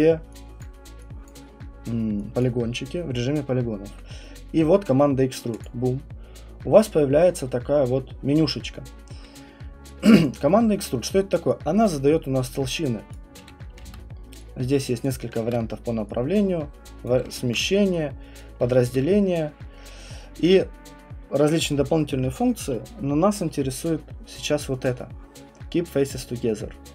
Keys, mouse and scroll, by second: 0.6 click, 1.2 click, 1.4 alt+click, 2.4 click, 5.6 click, 10.2 alt+click, 13.1 click, 13.8 ctrl+z, 15.0 click, 15.4 ctrl+z, 17.0 click, 17.4 ctrl+z, 18.4 click, 18.9 ctrl+z.